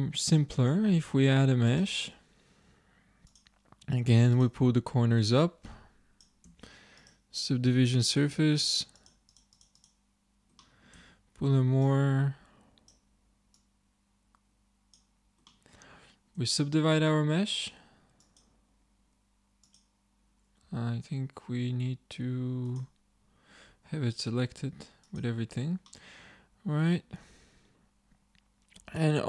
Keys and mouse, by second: 1.1 shift+a, 2.7 Tab, 3.9 click, 5.7 click, 6.5 Tab, 10.7-11.7 middle drag, 11.0 Tab, 12.2 click, 14.4 click, 15.6 middle click, 16.4 Tab, 17.0 Tab, 20.4 click, 20.7 a, 23.8 a, 25.1 click, 25.9 middle click, 28.9 a.